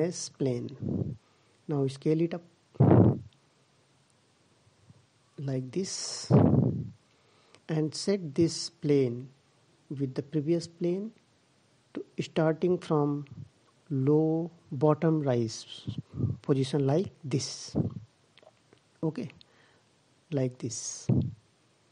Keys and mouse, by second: 3.0 s, 8.9-12.1 middle drag, 12.1 click, 18.6-20.4 middle drag.